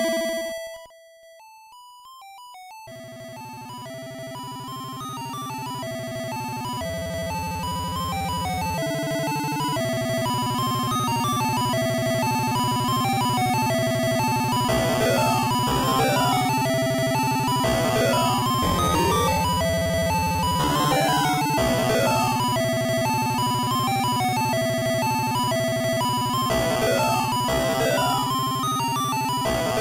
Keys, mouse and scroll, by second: 1.3 right click, 1.8 right click, 4.8 click, 6.8-8.0 scroll up 1, 10.0 click, 12.3 click, 19.1 click.